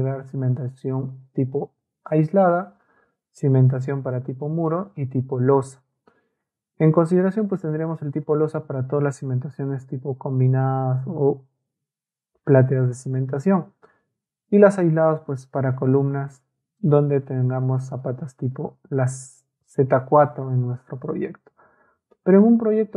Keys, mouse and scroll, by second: 16.8-17.9 ctrl+drag.